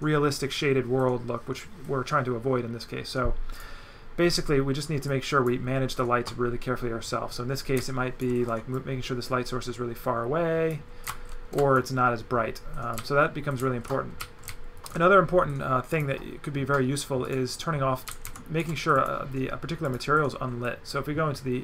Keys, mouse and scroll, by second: 3.6 click, 5.1 click, 7.8 z, 7.9 right click, 8.8 click, 11.0 right click, 12.9 right click, 17.2 right click, 18.1 alt+right click, 18.6 x, 19.0 click, 19.9 click, 20.6 click.